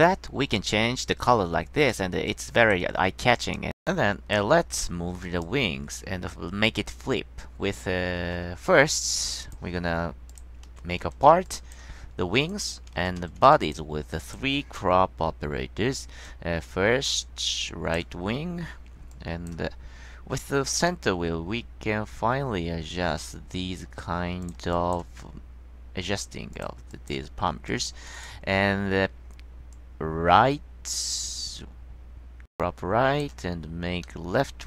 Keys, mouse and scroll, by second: 2.4 click, 3.5 click, 5.4 click, 8.4 c, 9.5 click, 10.4 click, 10.8 ctrl+v, 11.6 click, 12.6 click, 13.4 ctrl+c, 13.7 click, 14.4 click, 16.4-18.1 drag, 18.6 middle click, 19.2 click, 21.0-24.0 middle drag, 24.5 click, 24.9 click, 26.7 click, 27.0 click, 27.8 click, 28.3 click, 29.9-33.4 drag, 34.2-34.6 middle drag.